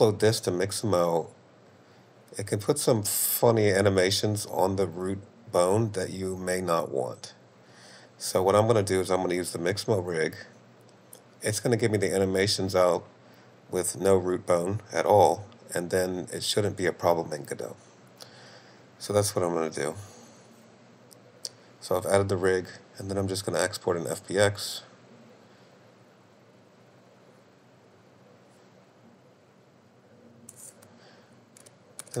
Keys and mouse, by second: 7.3-8.8 drag, 18.8 click, 22.5-27.3 drag.